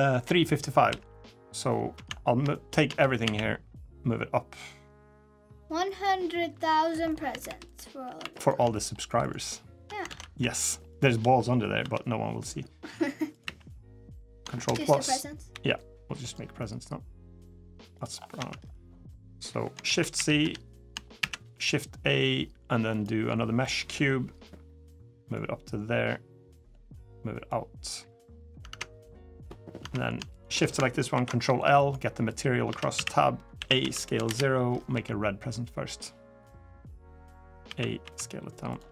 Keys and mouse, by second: 0.5 KP_3, 0.7 KP_1, 1.7 Tab, 2.3 shift+middle click, 2.6 Tab, 3.0 a, 5.6 middle click, 6.4 click, 6.8 middle drag, 7.2 3, 7.5 click, 7.8 Tab, 8.0 3, 8.2 click, 9.9 ctrl+z, 10.4 shift+click, 10.7 shift+click, 11.6 i, 13.2 e, 14.4 ctrl+KP_Add, 15.3 g, 16.4 click, 18.1 Tab, 18.5 drag, 19.6 shift+c, 19.9 KP_1, 20.2 KP_3, 21.0 shift+a, 25.1-26.5 drag, 27.3-28.3 drag, 28.4 Tab, 28.8-29.2 middle drag, 29.6 Tab, 30.9 ctrl+l, 32.0 click, 32.5 Tab, 32.7 a, 33.3 a, 33.6 s, 34.7 g, 37.4 a, 37.8 s.